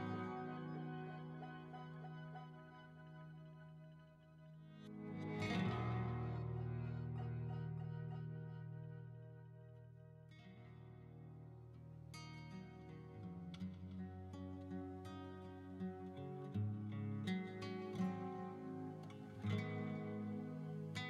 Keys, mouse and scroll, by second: 0.0-3.6 typing, 0.7 click, 1.6 click, 2.3 click, 2.8 click, 4.0 click, 4.1 scroll down 3, 4.3 shift+middle click, 4.5 scroll up 1, 4.6 scroll down 1, 4.7 scroll down 1, 4.9 shift+middle click, 5.0 scroll up 4, 5.2 shift+middle click, 5.6-7.5 typing, 6.1 click, 6.7 click, 6.7 shift+middle click, 7.4 click, 7.8 middle click, 8.6 s, 8.7 x, 9.0 click, 9.2 shift+middle click, 10.3 alt+z, 10.3 click, 10.3 1, 10.8 middle click, 11.6 right click, 11.6-12.8 typing, 12.8 middle click, 12.8 click, 13.4 middle click, 13.5 click, 13.8 s, 13.8 x, 14.5-16.5 middle drag, 14.5 click, 15.4 Tab, 16.5 Tab, 16.5 right click, 16.5-17.1 shift+scroll down 1, 17.1 shift+middle click, 17.1 scroll up 1, 17.5 ctrl+r, 18.6 click, 18.7 middle click, 19.5 middle click, 19.9 middle click, 20.3 3, 20.4 right click, 20.9 shift+right click.